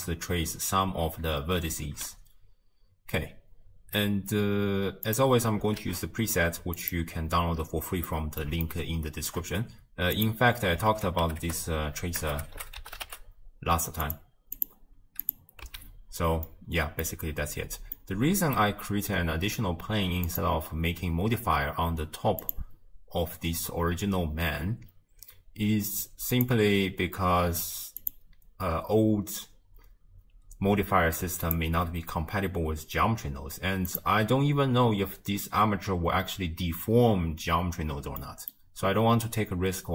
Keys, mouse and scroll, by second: 1.9 shift+space, 5.1-6.9 drag, 6.9 shift+a, 7.4-8.1 scroll up 6, 8.1-10.3 middle drag, 10.3-14.1 drag, 15.3 click, 15.7 x, 16.7 middle click, 17.2-18.2 scroll up 1, 18.2-21.3 middle drag, 21.3 click, 28.2 click.